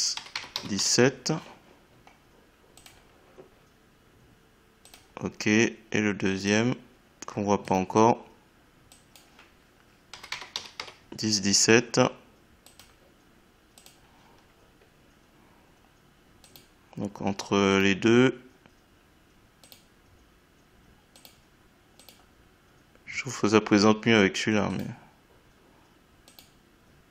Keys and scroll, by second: 0.1 1, 10.1 1.